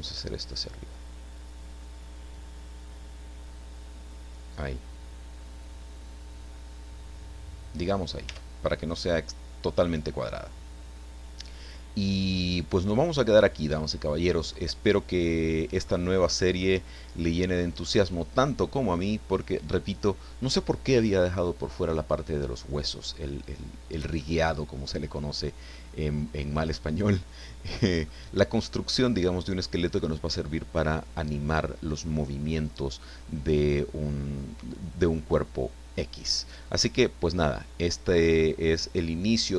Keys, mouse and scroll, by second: 0.2-1.6 drag, 1.6 scroll down 1, 2.1 scroll down 1, 2.9 scroll down 1, 3.8 scroll down 1, 8.2 Tab, 8.8-16.0 middle drag, 16.0-16.6 scroll down 1, 16.6-17.7 middle drag, 17.9 scroll up 1, 18.6 scroll up 1, 19.3 scroll down 1, 23.4 scroll down 1, 24.2-25.3 middle drag, 25.7-28.2 middle drag, 34.2-34.7 scroll down 2, 35.2-35.6 scroll up 2, 35.8 scroll down 2, 36.3 scroll down 2, 36.8-37.1 scroll down 2, 37.3 scroll up 2, 38.4-39.5 drag.